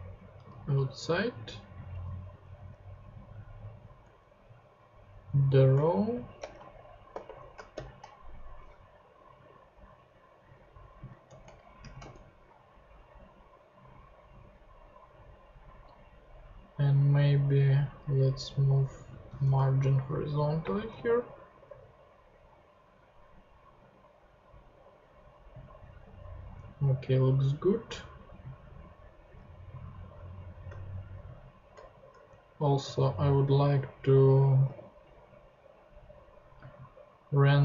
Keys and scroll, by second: 0.3 shift+Tab, 2.4 Up, 4.0 Return, 6.1-8.2 typing, 11.2 Return, 11.8 shift+,, 12.0 shift+/, 13.0 /, 18.9 super+x, 19.4 super+BackSpace, 20.2 BackSpace, 20.6 space, 20.9 super+v, 21.6 super+Tab, 32.1 shift+Tab, 32.8 Tab.